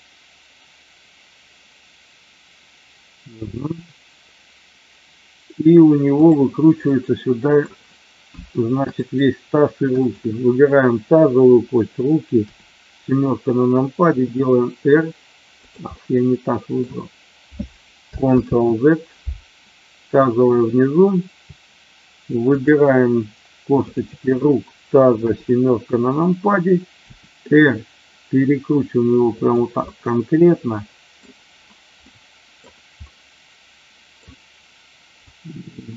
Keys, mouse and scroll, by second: 6.1 click, 6.8-7.5 middle drag, 9.0-9.5 shift+drag, 10.0-10.4 shift+drag, 14.1 r, 15.9-16.8 middle drag, 18.4 ctrl+z, 20.4 click, 22.4 shift+click, 23.9-24.3 shift+drag, 27.1 r, 29.3 click, 29.8-31.2 middle drag, 32.1 middle click, 33.2 middle click, 35.2-35.9 drag.